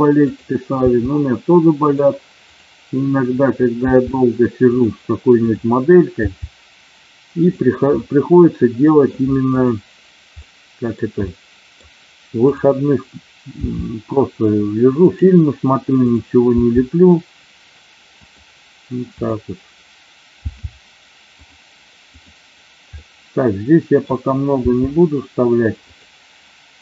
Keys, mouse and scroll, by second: 0.2 click, 2.5 click, 3.7 g, 4.6 click, 5.4 click, 6.3 g, 7.5 click, 8.0-9.1 middle drag, 10.4 middle click, 11.2 middle click, 13.5 g, 15.1 click, 16.9 g, 18.1 click, 19.1 click, 20.4 g, 21.2 click, 22.0 click, 22.9-24.0 middle drag, 24.6 g, 25.9 click.